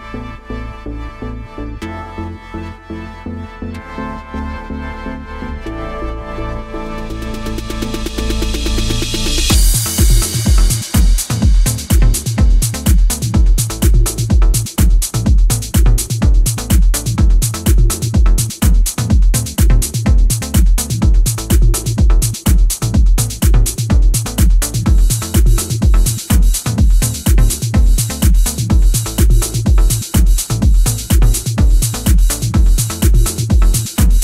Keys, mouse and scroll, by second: 0.2 middle click, 0.5-0.9 scroll down 2, 0.9 middle click, 6.3 click, 7.0 middle click, 10.6-11.4 scroll down 1, 11.4-13.6 scroll up 2, 13.8 Tab, 14.4-14.9 scroll down 1, 15.1 middle click, 18.4-19.4 scroll up 1, 19.4-19.8 scroll down 1, 26.2-26.7 scroll down 1, 26.7-27.4 scroll up 1, 27.4-28.6 scroll down 1, 28.6 Tab, 31.5 click, 32.7 Tab, 33.3-33.7 scroll down 2, 33.7 middle click.